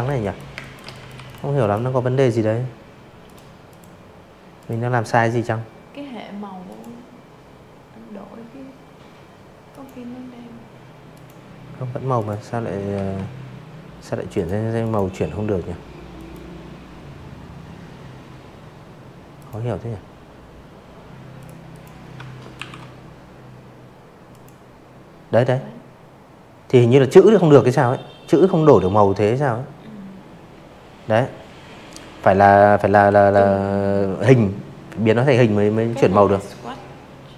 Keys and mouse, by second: 0.2 click, 0.6 click, 1.5 click, 3.6 click, 6.6 click, 8.1 click, 9.1 click, 9.9 v, 11.3 click, 11.7 click, 13.1 click, 16.3 click, 18.3 click, 18.6 click, 19.5 ctrl+shift+o, 21.3 click, 35.2 click, 36.4 click, 37.1 click.